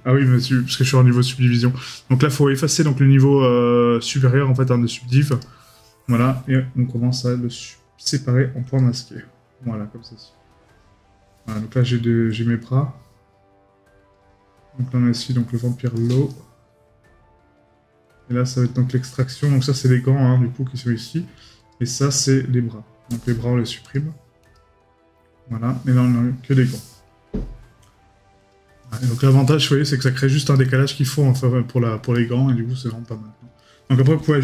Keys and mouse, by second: 29.6 right click, 33.6 right click.